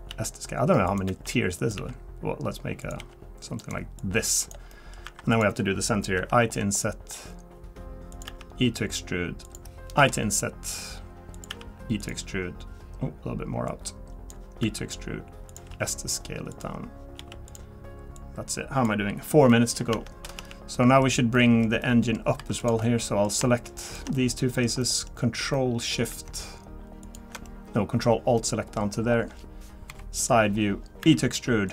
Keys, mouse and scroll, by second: 0.1 s, 1.1 e, 1.7 s, 3.0 g, 4.0 click, 4.7 middle click, 5.0 3, 5.3 click, 6.2 i, 8.3 e, 11.5 e, 13.7 click, 14.6 e, 15.7 s, 17.2 s, 18.1 click, 19.2 scroll down 1, 19.5 middle click, 19.7 scroll down 1, 19.9 Tab, 20.4 Tab, 20.7 middle click, 21.3 middle click, 22.4 3, 22.6 click, 22.8 middle click, 23.8 shift+click, 24.1 middle click, 24.8 middle click, 25.1-25.6 scroll up 4, 25.5 middle click, 27.0 ctrl+shift+click, 27.4 middle click, 28.4 middle click, 28.8 scroll down 2, 29.9 scroll down 6, 29.9 KP_3, 31.0 e.